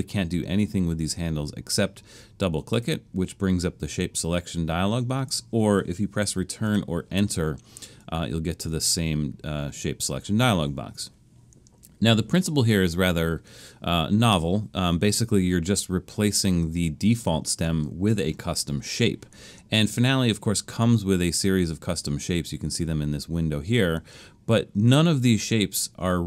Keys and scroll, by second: 6.7 Return.